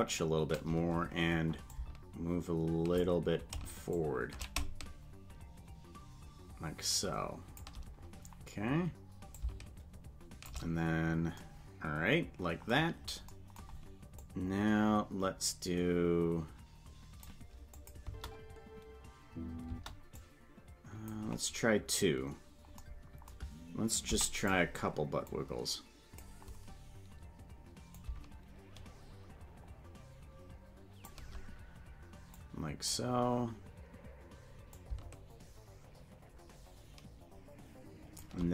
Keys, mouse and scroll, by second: 1.7-3.0 shift+drag, 3.9 shift+click, 5.5-7.6 shift+drag, 9.3-10.5 shift+drag, 14.3-17.3 drag, 17.8 click, 18.0 space, 19.7 space, 20.2 click, 24.0 i, 25.3-26.3 drag, 27.9-31.1 shift+drag, 32.4 click, 34.7-38.2 shift+drag.